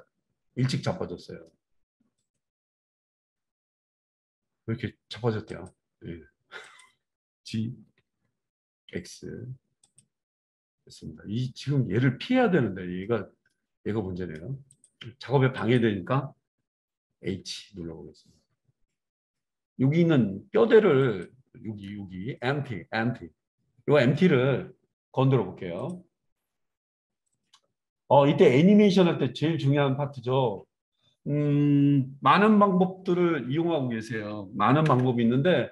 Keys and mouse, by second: 2.1 click, 2.7-5.5 middle drag, 5.5 click, 6.7 click, 6.8-15.6 middle drag, 6.9 g, 15.6 click, 15.7-18.7 middle drag, 17.3 h, 21.1 click, 22.2-25.4 alt+middle drag, 22.3 alt+2, 27.3 click, 27.9-35.7 middle drag.